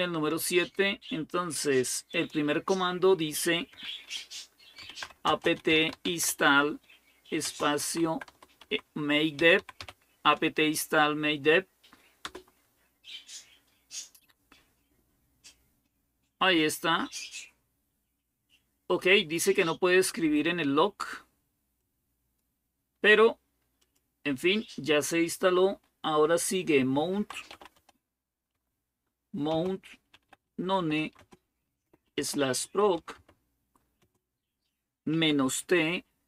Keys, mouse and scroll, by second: 1.9 click, 4.4-10.1 typing, 12.0 Return, 21.6-22.6 drag, 23.6 click, 26.7-33.8 typing, 34.9-35.4 typing.